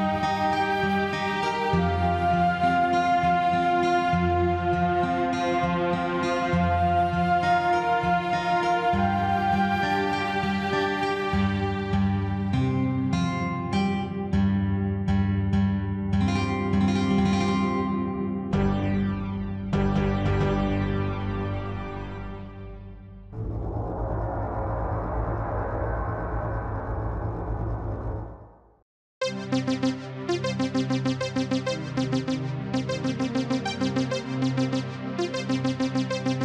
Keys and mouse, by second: 0.9 click, 1.8 click, 3.1 KP_Add, 3.9 click, 4.8 click, 6.3 click, 7.4 click, 8.9-11.0 drag, 11.9 click, 12.8 click, 14.2 click, 15.6 click, 16.8 click, 18.6 click, 21.2 click, 23.2 click, 24.8 click, 27.6 click, 28.8 KP_Subtract, 31.0 click, 31.6 x, 32.4 click, 33.7 click.